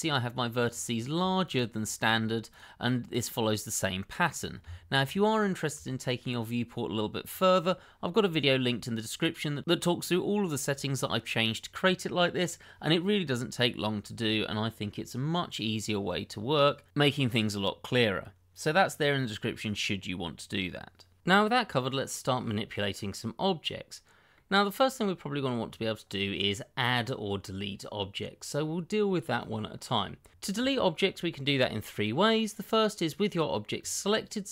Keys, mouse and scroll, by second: 0.6 click, 1.4 shift+click, 1.9 click, 2.5 shift+click, 2.7 click, 4.3 click, 4.6 Tab, 5.8 shift+middle click, 22.2-23.0 scroll down 1, 23.0 middle click, 30.3 click, 33.8 click.